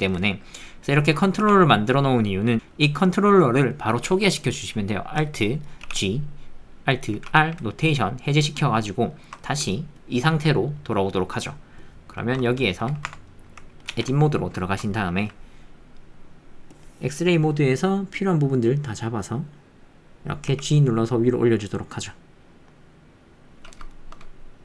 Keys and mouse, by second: 5.8 alt+g, 7.1 alt+r, 8.6 click, 9.1 shift+click, 9.4 ctrl+click, 9.4 ctrl+middle click, 11.2 shift+click, 11.3 shift+middle click, 12.4 ctrl+click, 12.6 shift+click, 13.1 Tab, 13.3 click, 13.9 alt+z, 14.2 ctrl+click, 14.6 shift+click, 14.9 ctrl+click, 16.9-19.6 drag, 23.9 shift+click.